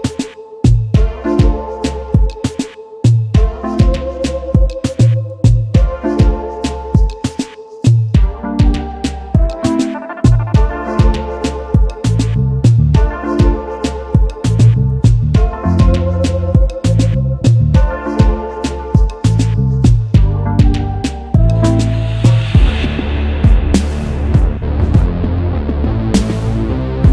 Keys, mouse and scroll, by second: 0.1 space, 4.9 =, 8.9 v, 11.0 =, 14.5 alt+scroll down 1, 15.5 typing, 17.2 typing, 26.0 alt+scroll up 1.